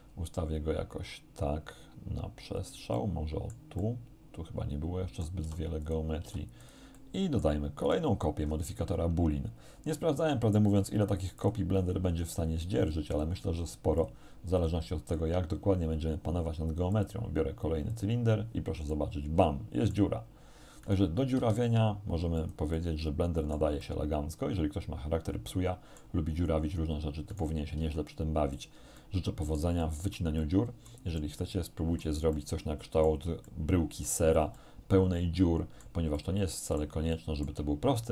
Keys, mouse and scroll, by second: 2.6 click, 3.0 middle click, 4.4-5.5 drag, 5.5 r, 5.9 click, 6.3 g, 6.6 click, 7.0 middle click, 7.9 right click, 8.5 middle click, 11.4 click, 13.2 click, 14.0 click, 14.6 click, 15.1 click, 17.0 click, 18.0 click, 19.0-20.2 middle drag, 20.9 right click, 21.4 g, 22.4 click, 22.8-23.8 middle drag, 25.0-26.2 middle drag, 27.4 right click, 27.8 g, 28.6 click, 29.0-30.4 middle drag, 31.2-32.2 drag, 32.4 shift+click, 33.5 shift+click, 34.6-36.0 drag, 36.2 click, 37.2 shift+middle click.